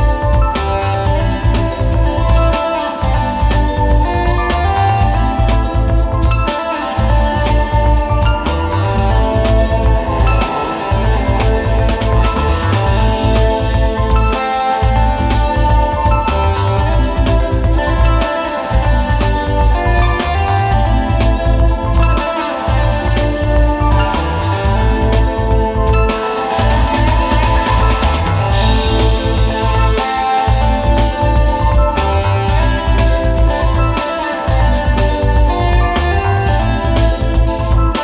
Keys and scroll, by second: 0.5 super+g, 0.6 space, 1.1 super+space, 2.5 space, 3.9 super+', 4.8 space, 5.7 super+[, 6.1 space, 6.6 space, 7.0 super+g, 7.2 space, 7.7 super+", 7.9 alt+super+space, 8.5 space, 9.2 space, 9.6 space, 11.5 space, 13.8 super+z, 15.7 super+], 16.5 super+z, 17.9 super+], 18.5 space, 19.7 super+z, 20.9 super+[, 21.3 space, 22.9 space, 23.2 super+z, 24.9 super+], 25.3 space, 25.8 super+space, 26.3 super+space, 27.6 alt+super+space, 30.4 super+Tab, 31.0 space, 32.7 super+z, 34.3 super+[, 34.5 super+[, 35.2 space, 35.9 space, 36.4 super+space, 36.6 super+space.